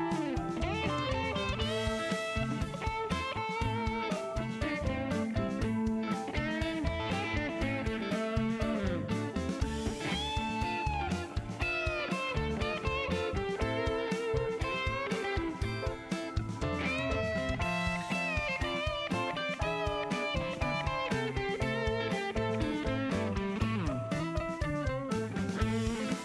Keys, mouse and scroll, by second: 0.7 click, 3.5 click, 4.7 click, 7.6 shift+right click, 10.1 click, 11.1 click, 11.8 click, 12.5 click, 13.1 click, 15.6 shift+right click, 23.8 shift+middle click, 25.0 click.